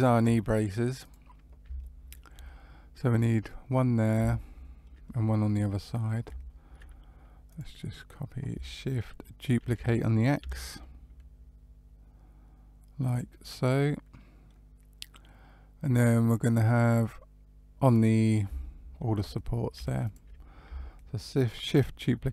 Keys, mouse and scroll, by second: 0.9 click, 1.7 shift+middle click, 2.6-4.0 scroll down 1, 4.3 shift+middle click, 5.0 middle click, 7.4 click, 9.5 shift+d, 13.4 middle click, 17.2 scroll down 1, 18.5 shift+middle click, 20.0 shift+click, 20.2-20.6 scroll down 1.